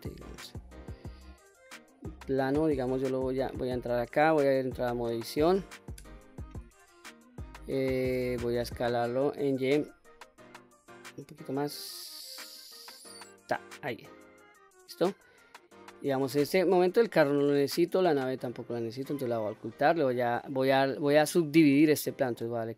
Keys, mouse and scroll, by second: 0.2 middle click, 0.9-1.4 scroll down 1, 1.5 middle click, 3.2 click, 5.7 Tab, 6.3-7.5 middle drag, 8.7 s, 9.5 y, 13.2 click, 13.8-14.8 middle drag, 17.0 click, 18.8 click, 19.4 middle click, 20.3-21.4 middle drag, 22.0 right click.